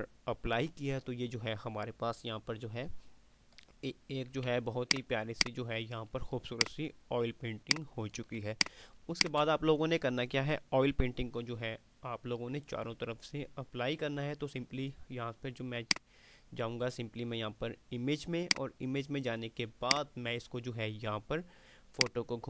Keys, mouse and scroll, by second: 4.7 alt+click, 5.0 alt+space, 6.3 alt+click, 6.7 alt+space, 7.5 ctrl+click, 16.0 click.